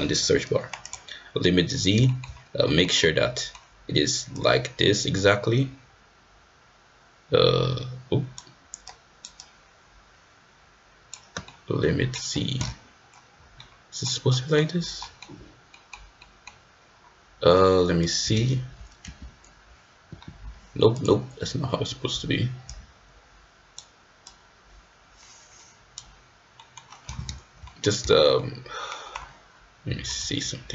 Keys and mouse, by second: 2.1 shift+middle click, 2.7 middle click, 3.0-3.6 middle drag, 4.4-8.4 drag, 8.9 click, 9.4-11.1 right drag, 11.5-12.1 middle drag, 13.6-14.1 middle drag, 14.3 middle drag, 14.5 click, 14.6 middle click, 15.0 middle click, 15.7 middle drag, 16.2 middle drag, 20.0 g, 21.1-22.1 drag, 22.7-23.8 drag, 24.3-26.0 drag, 26.6 middle click, 27.7 middle drag, 28.1 shift+middle click, 28.4-28.9 middle drag.